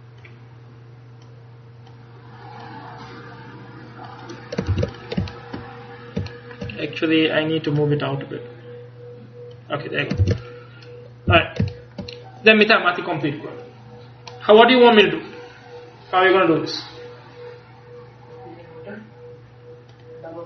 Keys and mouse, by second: 1.3-4.8 drag, 4.8 ctrl+s, 10.3 ctrl+s, 11.4 a.